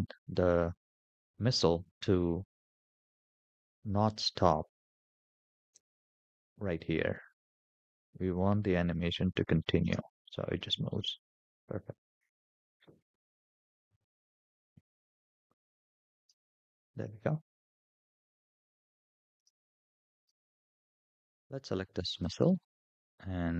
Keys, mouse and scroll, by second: 8.9 click, 9.6 space, 11.2 space, 12.3-13.9 drag, 15.6 click, 16.0 space, 17.5 space, 18.8 click, 19.2 space, 20.0 space, 20.6 click, 21.9 click.